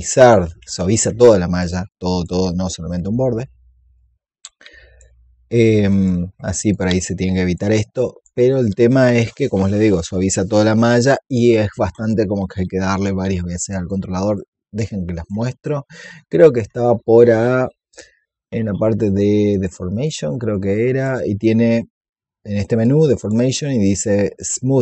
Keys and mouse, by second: 1.1 alt+click, 1.8 click, 3.8 shift+click, 5.8 shift+click, 6.6 click, 7.8 alt+click, 8.6 click, 9.3 alt+click, 14.2 click, 19.4-22.2 drag, 22.7 click.